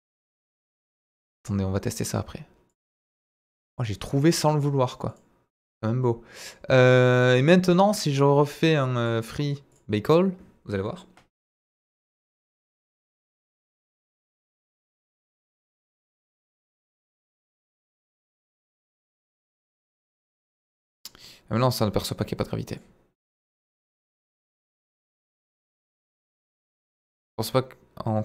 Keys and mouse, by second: 1.0 click, 2.6 click, 3.7 click, 4.5 click, 5.0 click, 9.7-14.1 drag, 14.7-21.0 drag, 22.7-28.2 drag.